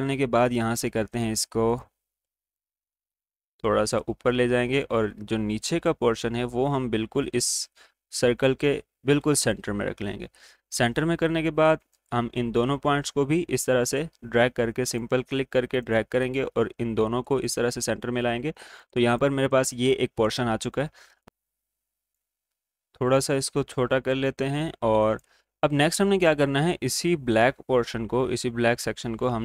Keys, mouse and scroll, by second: 4.6-27.6 drag.